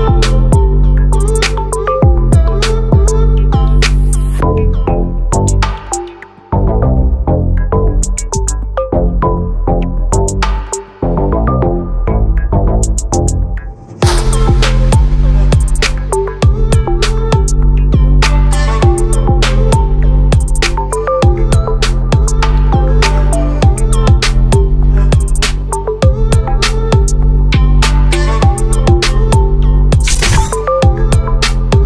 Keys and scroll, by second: 13.3 ctrl+a, 17.7 ctrl+t, 26.7 ctrl+t.